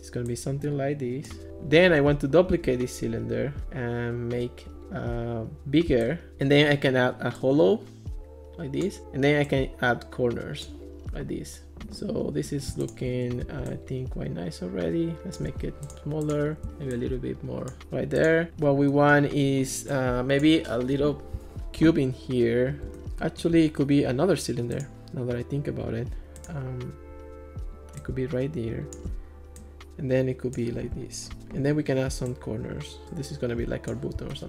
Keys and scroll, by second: 2.5 super+d, 6.3 super+z.